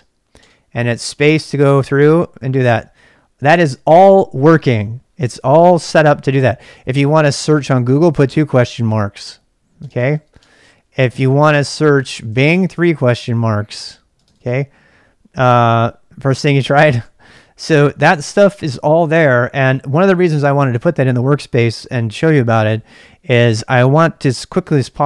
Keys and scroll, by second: 0.1-3.2 typing, 6.6-12.3 typing, 8.3 Return, 11.5 ctrl+[, 12.7 Return, 14.1 space, 14.4 space, 16.9-19.2 typing.